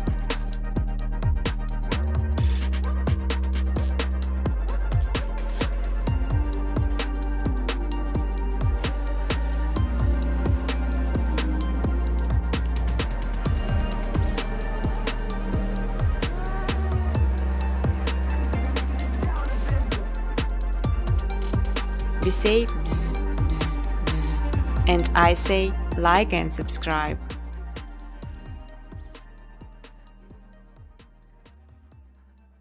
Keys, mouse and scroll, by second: 2.0 space, 2.5 click, 2.7 middle click, 4.3 click, 6.5 click, 7.3-8.5 typing, 9.4 click, 9.7 click, 11.4 click, 12.5 Tab, 13.3-14.2 typing, 14.2 click, 15.3 click, 17.3 click, 18.1 space, 21.9 space, 25.9 click, 27.5 space, 28.9 space, 29.2 space, 30.4-32.6 typing.